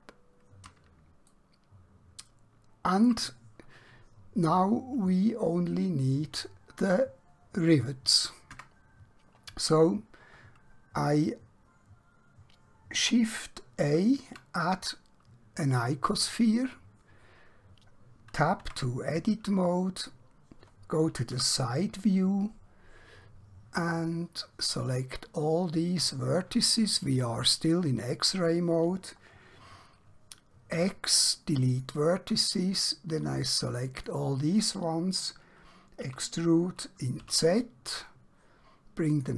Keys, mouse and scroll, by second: 1.3 shift+middle click, 8.6 Tab, 16.1 click, 18.7 Tab, 21.3 KP_1, 24.8 click, 30.9 x, 31.6 click, 36.1 e, 39.2 click.